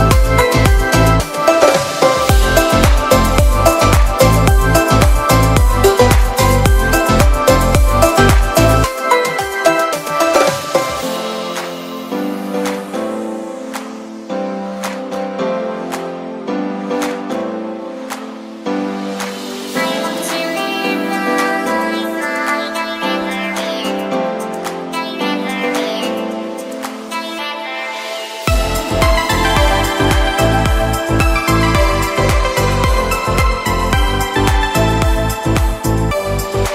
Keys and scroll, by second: 0.9 [, 2.3 ], 4.1 ], 4.9 ], 6.2 [, 7.9 ], 13.4 ], 17.1 v, 20.1 i, 22.5 b, 23.4 ], 32.4 e.